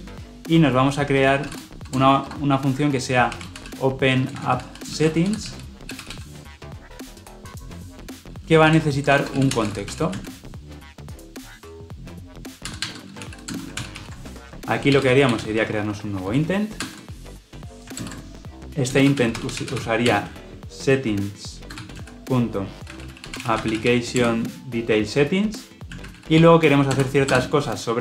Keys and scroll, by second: 13.6 ctrl+alt+l, 13.8 ctrl+alt+o, 17.9 alt+Return, 24.1 Return, 26.8 Return.